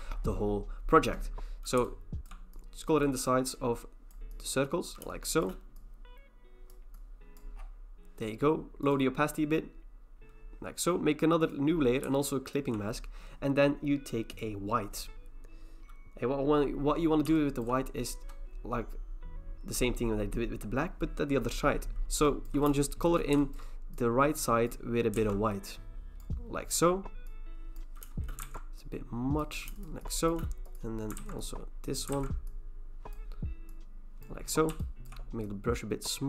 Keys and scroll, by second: 25.2 ctrl+z, 28.4 ctrl+z, 31.2 ctrl+z, 32.1 ctrl+z.